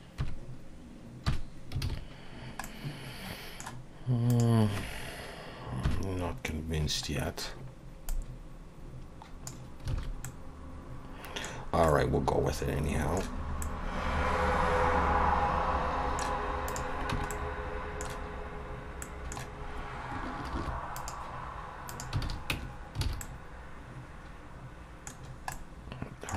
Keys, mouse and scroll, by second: 0.2 KP_3, 1.3 KP_1, 1.8 alt+a, 2.3-2.6 scroll down 3, 2.6 middle click, 4.3 click, 7.0-7.3 scroll up 3, 7.0 KP_1, 8.1 click, 9.9 alt+a, 10.2 middle click, 11.6-12.1 scroll down 2, 11.9 middle click, 13.4 scroll up 2, 13.6 middle click, 17.1 Tab, 17.1 click, 17.3 middle click, 19.0 middle click, 19.6 scroll up 1, 20.5 ctrl+r, 22.2 alt+a, 22.5 Tab, 23.0 alt+a, 23.2 middle click, 25.2-25.5 scroll down 3, 25.5 middle click.